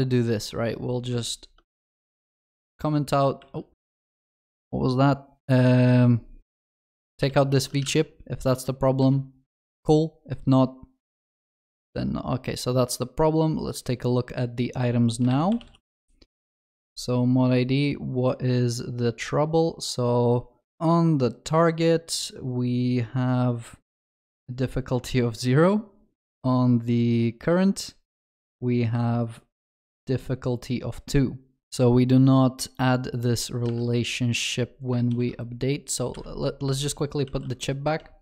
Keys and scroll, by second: 2.7 ctrl+., 3.4 ctrl+z, 6.7 ctrl+KP_Add, 7.3 ctrl+x, 35.2 ctrl+shift+n, 36.8 ctrl+z, 37.3 ctrl+s.